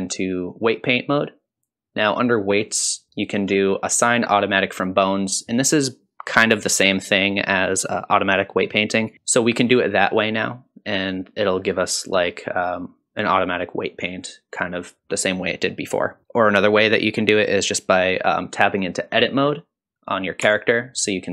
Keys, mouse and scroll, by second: 2.5-9.1 drag, 9.1-11.4 middle drag, 16.2 shift+middle click, 19.1 click, 20.4 Tab, 21.0 middle click.